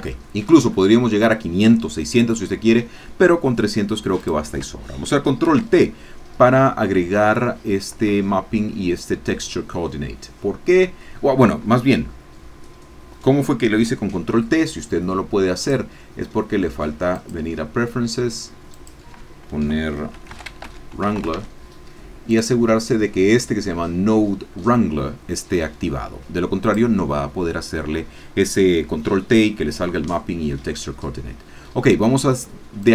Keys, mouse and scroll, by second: 0.7-1.9 shift+scroll up 1, 4.2 click, 5.4 ctrl+t, 6.9-8.5 middle drag, 15.6 click, 17.1 click, 18.7-20.1 drag, 20.1-21.3 typing, 22.3-25.6 drag, 26.7 click, 32.8-32.9 drag.